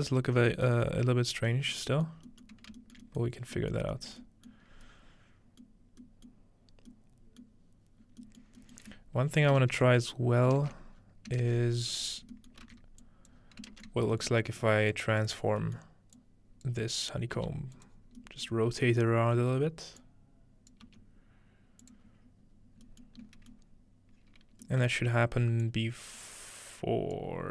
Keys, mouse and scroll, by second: 0.7-1.3 scroll up 2, 1.3-3.0 scroll down 6, 3.0 shift+middle click, 3.3 shift+middle click, 3.9 shift+middle click, 4.1 shift+middle click, 4.6 shift+middle click, 4.7-6.3 scroll up 1, 5.7 middle click, 6.6 middle click, 6.6-8.2 scroll down 1, 7.5 middle click, 8.8-10.2 ctrl+middle drag, 8.8-9.4 scroll down 1, 9.8-11.0 scroll up 1, 10.6 ctrl+space, 11.0-12.3 scroll down 2, 11.4 ctrl+space, 11.6 ctrl+space, 12.3-13.3 middle drag, 12.6 alt+a, 13.0-18.2 drag, 13.5 scroll down 1, 13.7 ctrl+space, 15.4-17.4 scroll down 2, 17.4 g, 17.9 scroll down 1, 18.1 scroll up 1, 18.2 scroll down 1, 19.3 scroll up 2, 20.0 click, 20.9 g, 22.1 click, 22.1-22.4 scroll down 2, 22.4 scroll up 2, 23.2-24.4 scroll up 3, 24.4-25.6 scroll down 2, 25.6-27.5 drag.